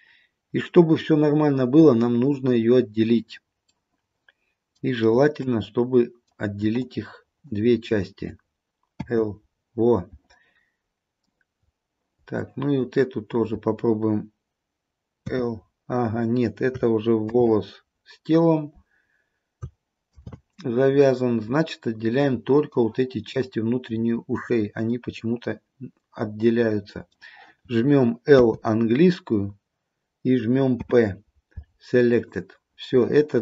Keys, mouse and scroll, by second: 3.8 middle click, 4.4 middle click, 6.8 shift+click, 9.1 l, 12.5 shift+click, 15.4 l, 17.5 ctrl+z, 20.1 ctrl+click, 20.4 ctrl+z, 22.2 middle click, 25.0 middle click, 28.4 l, 30.9 p.